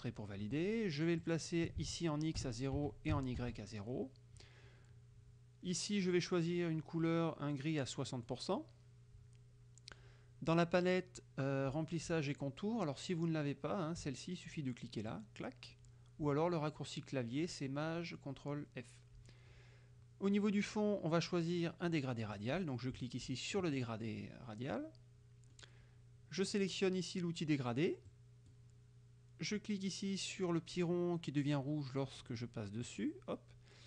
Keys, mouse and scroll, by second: 1.3 click, 1.9 ctrl+a, 2.4 ctrl+KP_0, 2.9 Tab, 3.2 KP_0, 3.4 Tab, 8.2 click, 15.2 click, 22.4-23.8 drag, 24.3-25.8 drag, 28.2 click, 32.9 click.